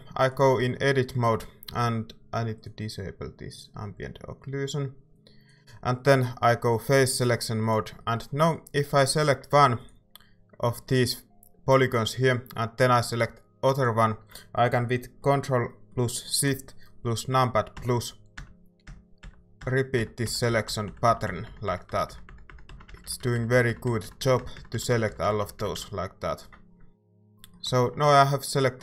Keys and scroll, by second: 0.6 Tab, 1.7 a, 9.5 a.